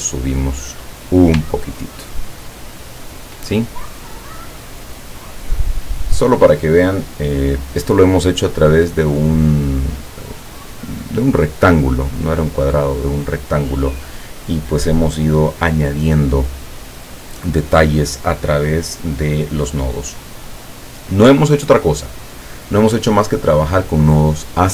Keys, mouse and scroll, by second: 1.6-2.1 ctrl+scroll down 1, 2.5 ctrl+scroll down 1, 5.1 click, 5.5 click, 22.8 click.